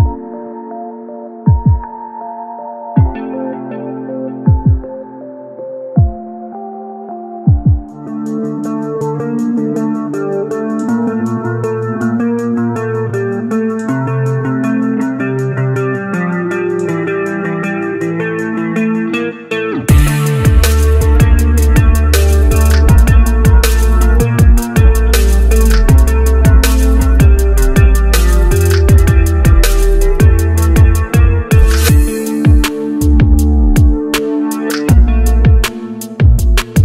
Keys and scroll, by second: 14.0 ctrl+z.